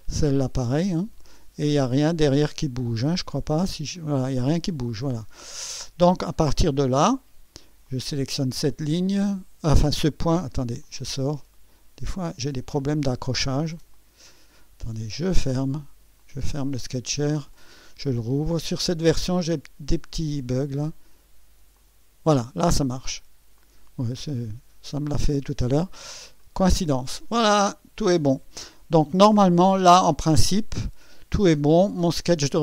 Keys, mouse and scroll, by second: 0.3-1.9 drag, 2.0 scroll down 1, 3.7-6.2 drag, 6.3-7.0 scroll up 4, 7.8 click, 9.2 click, 10.3 right click, 10.8 click, 12.1 click, 13.2 click, 13.6 click, 14.3 right click, 15.3 click, 16.2 click, 17.5 click, 18.5 scroll down 2, 19.5 scroll down 2, 20.1 scroll up 2, 21.8 click, 23.6 click, 26.3 click, 27.3-28.0 scroll down 4, 29.4 click, 30.3-32.2 scroll down 10.